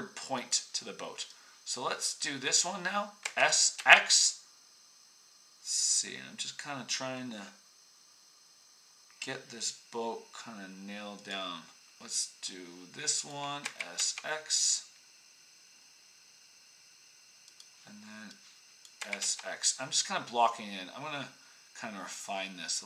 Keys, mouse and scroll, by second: 0.4 middle click, 3.2 s, 13.6 s, 18.9 s.